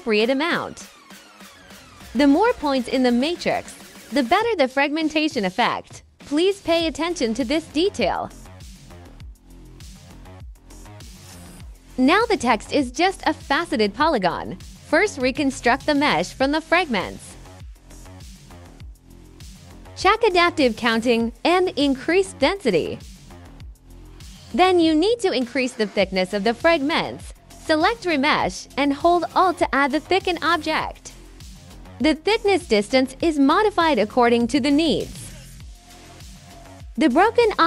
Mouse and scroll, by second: 2.1 middle click, 4.6 click, 5.7 click, 7.5 click, 8.8 click, 9.6 right click, 10.1 click, 11.3 click, 11.8 click, 12.1 right click, 13.4-16.2 drag, 18.9 click, 20.2 click, 21.9 right click, 22.5 click, 24.0-27.1 drag, 28.4 click, 30.2 click, 33.7 click, 34.1-37.1 drag, 37.3 right click.